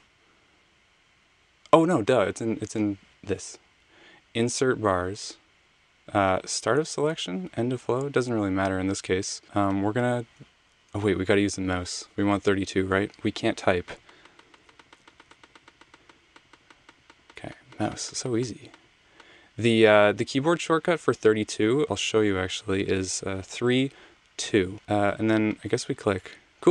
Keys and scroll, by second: 22.5 BackSpace, 23.4 3, 24.1 2.